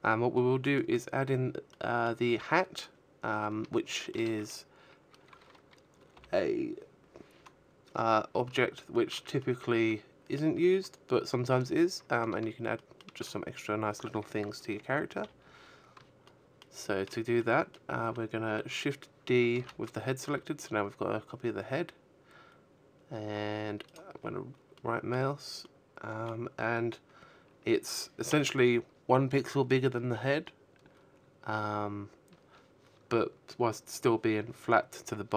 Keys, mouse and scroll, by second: 0.0 right click, 1.2 shift+middle click, 1.7 Tab, 3.4 l, 4.0-4.6 scroll up 1, 4.6-5.0 scroll up 5, 6.2 shift+middle click, 6.7 middle click, 10.1 shift+middle click, 12.5 KP_3, 13.5 shift+middle click, 16.2 shift+middle click, 16.8 shift+d, 21.1 right click, 21.9 middle click, 22.9 middle click, 25.6 KP_1.